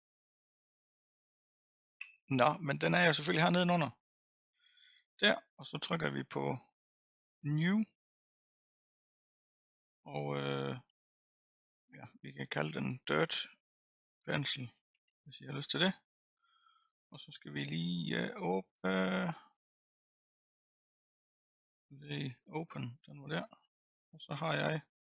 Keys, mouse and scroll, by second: 1.1-22.5 drag, 23.0-25.0 drag.